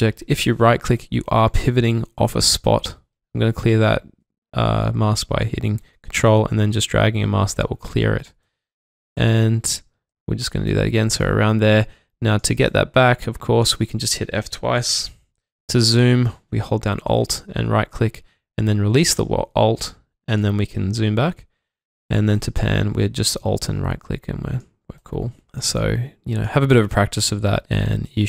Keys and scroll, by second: 2.6 ctrl+Num_Lock, 2.6 typing, 13.0 ctrl+Num_Lock, 14.9 typing, 20.2 typing.